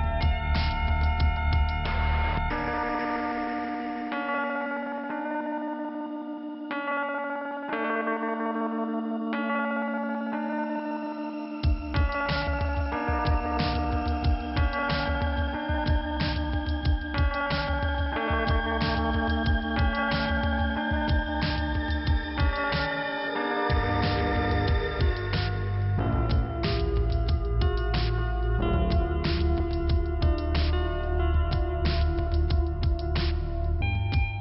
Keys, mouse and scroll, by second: 1.6 click, 6.0 click, 6.1 click, 7.0 click, 7.1 click, 8.6 click, 8.7 click, 9.7 click, 9.7 click, 10.9 click, 13.9 click, 15.4 click, 16.5 scroll up 2, 16.8 click, 17.0 click, 18.0 click, 18.2 click, 20.1 click, 20.2 click, 22.2 click, 25.2 click, 27.0 click, 27.0 click, 28.0 click, 29.9 click, 31.5 click, 33.6 click.